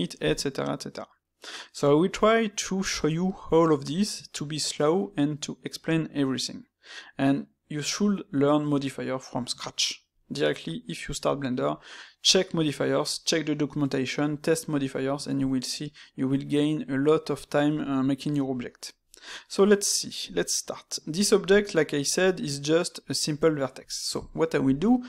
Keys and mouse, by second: 1.3-4.2 middle drag, 4.7-9.4 middle drag, 10.1-13.1 middle drag, 20.4-23.8 shift+middle drag, 23.8-25.0 ctrl+middle drag.